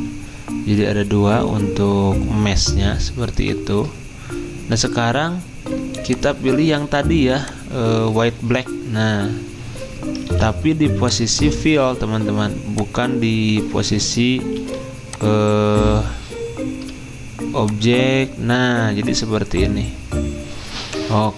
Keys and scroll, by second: 3.5 ctrl+z, 10.3 ctrl+z, 14.6 g.